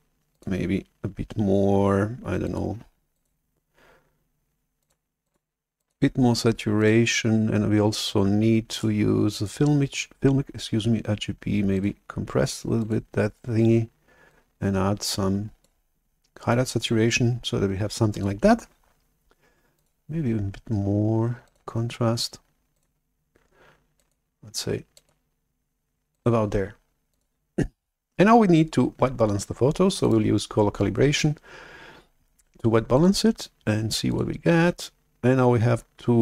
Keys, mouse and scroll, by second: 0.2 click, 2.3 click, 3.0 click, 4.7 click, 5.1 click, 5.7 click, 6.7 click, 8.6 scroll up 2, 9.3 click, 11.6 click, 12.7 click, 14.2-15.6 drag, 18.0 drag, 19.6 click, 21.4 click, 22.7 click, 23.9 click, 24.8 click, 26.0 click, 27.0 click, 30.1 click, 33.1 click, 34.0 click.